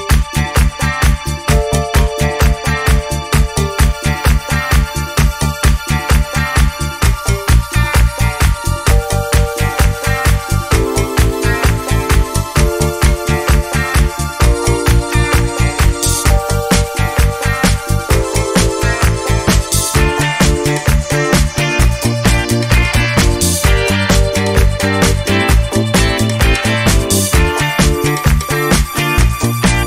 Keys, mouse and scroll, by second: 1.2 alt+Down, 5.7 alt+Down, 10.1 alt+click, 11.3 alt+Down, 13.5-14.0 ctrl+alt+scroll down 3, 14.8 middle click, 15.7 click, 15.8 click, 16.0 Down, 16.0 Right, 16.1 Up, 16.4 alt+Left, 16.9 alt+Left, 17.7 alt+click, 17.8 click, 18.0 click, 18.1 alt+Right, 18.5 alt+Right, 19.1 click, 19.3 alt+Right, 20.7 alt+Right, 20.9 alt+Right, 21.1 alt+Right, 21.3 alt+Right, 21.6 alt+KP_5, 21.8 click, 22.5 click, 23.2 ctrl+s, 24.3 ctrl+scroll up 2, 24.6 ctrl+click, 24.9 scroll up 4, 25.3-25.9 scroll down 6, 26.2 click, 26.4 click, 26.5 click, 26.6 Right, 26.9 Right, 27.8 click, 28.1 click, 28.4 click, 28.6 alt+Right, 28.8 alt+Right, 29.4 alt+Right.